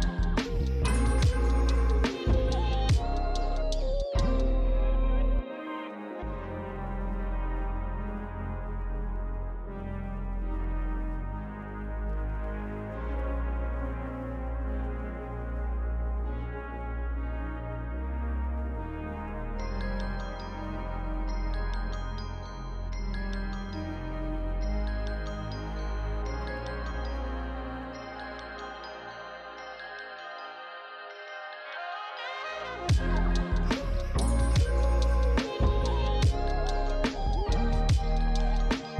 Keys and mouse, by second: 0.7 shift+click, 1.3 click, 2.6 f, 2.7 click, 2.8 f, 2.9 click, 5.0 click, 5.6-7.0 typing, 5.7 click, 6.4 click, 6.6 click, 6.9 click, 7.5 click, 10.7 alt+click, 12.8 alt+shift+click, 13.5 ctrl+z, 13.8 alt+shift+click, 14.9 ctrl+z, 15.1 alt+shift+click, 15.9 alt+shift+click, 16.7 click, 18.0 shift+click, 22.5 click, 24.0 shift+click, 25.2 shift+click, 28.3 shift+click, 29.2 click, 30.4-33.1 typing, 30.9 click, 32.6 click, 33.3 click, 34.2 z, 34.4 click, 37.1 click, 38.2 shift+click.